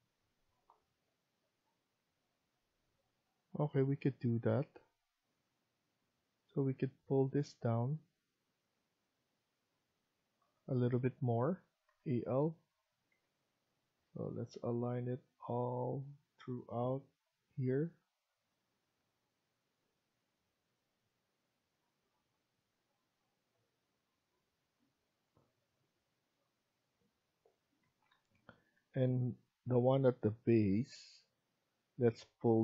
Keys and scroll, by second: 10.1 Escape, 11.8 a, 13.0 l, 27.7 Escape, 28.0 Escape.